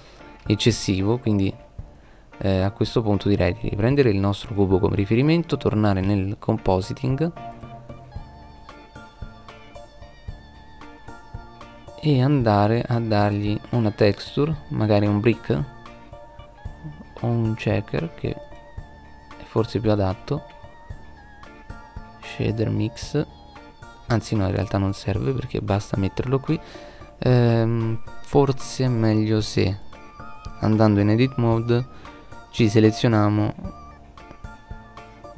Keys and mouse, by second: 2.4 right click, 6.1-7.5 drag, 32.3 click.